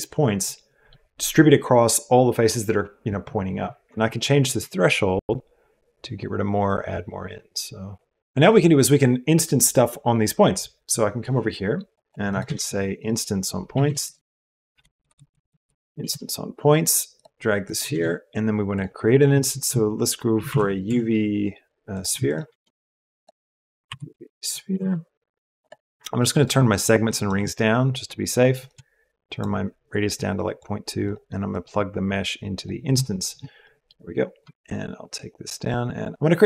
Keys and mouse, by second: 0.0 click, 0.1 middle click, 0.2 click, 0.7 middle click, 12.4 shift+a, 15.1 Down, 17.8 shift+a, 22.0 x, 22.4 shift+a, 32.7-34.4 middle drag.